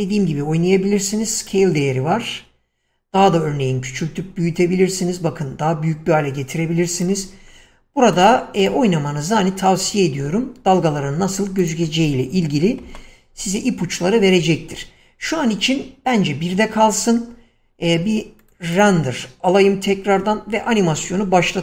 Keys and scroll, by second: 10.5 Escape, 12.9 1, 13.2 Return, 20.3 Escape.